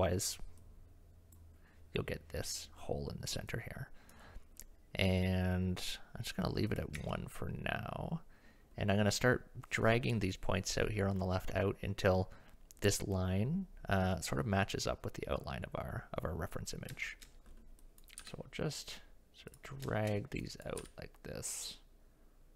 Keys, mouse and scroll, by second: 0.6 click, 3.5 click, 7.0 Tab, 17.0 shift+middle click, 17.8 click, 18.2 g, 19.9 shift+middle click, 20.5 click, 20.8 g.